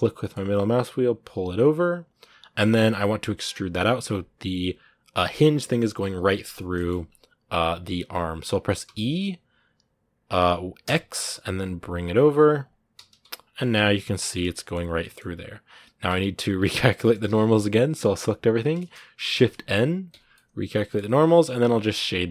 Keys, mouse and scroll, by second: 6.5 shift+middle click, 7.4-8.6 scroll up 1, 8.6 e, 13.2 scroll down 2, 13.4-14.6 middle drag, 14.6 scroll up 1, 14.8-15.8 middle drag, 15.8 Tab, 16.8 middle click, 17.0 a, 20.1-22.3 middle drag.